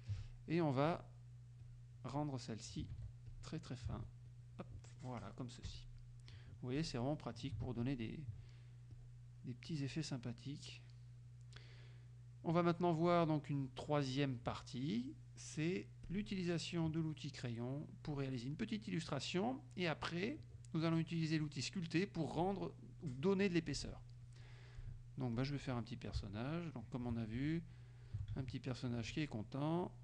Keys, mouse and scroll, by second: 1.0 click, 1.7 click, 2.2 click, 3.0 ctrl+z, 3.4 ctrl+click, 4.4 ctrl+z, 4.4 ctrl+click, 5.7 F1, 6.0 middle click, 6.3 click, 6.8 click, 7.9 ctrl+click, 9.0 click, 10.4 middle click, 11.1 middle click, 12.1 middle click, 12.7 middle click, 14.7 middle click, 16.2 click, 17.5 middle click, 18.7 middle click, 20.4-21.5 middle drag, 22.2 middle click, 23.0-24.2 middle drag, 25.5 click, 26.5 shift+click, 27.9 shift+click, 28.7 shift+click, 29.9 shift+click.